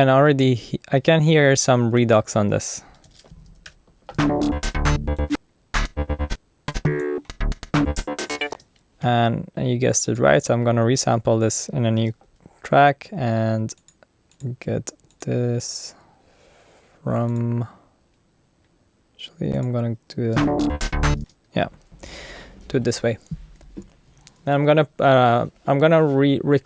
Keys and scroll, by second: 0.3 super+f, 1.6-4.1 typing, 3.6 Return, 8.5 space, 12.0 super+t, 20.3 space.